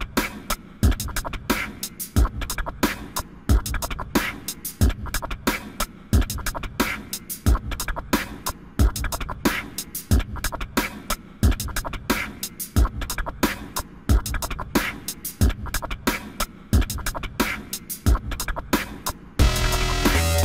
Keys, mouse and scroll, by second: 9.0 ctrl+z, 9.9 ctrl+z, 10.7 click, 18.0 ctrl+z, 18.9 click.